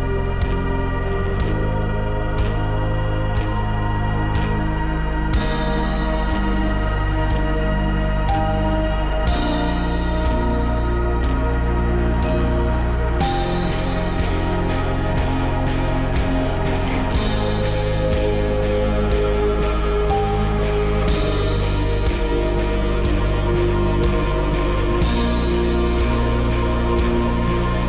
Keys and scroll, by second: 2.4 Return, 3.3 Return, 3.7 Return, 12.6 Return, 13.3 Return, 14.0 Return, 20.6 5, 22.4 5, 22.5 Return, 22.9 4, 23.1 Return, 24.1 1, 24.5 Return.